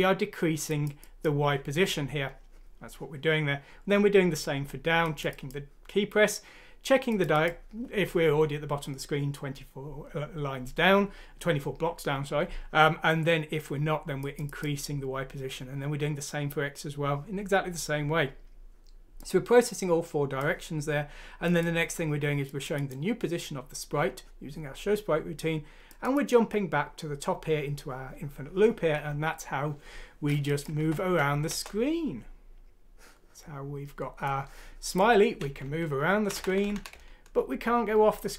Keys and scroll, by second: 30.8 F6, 31.5 Return, 35.6 Right, 36.2 Down, 36.5 Right, 36.5 Down, 36.6 Right, 36.6 Down, 36.8 Right, 36.9 Right, 37.4 Right, 38.0 Right, 38.2 Right.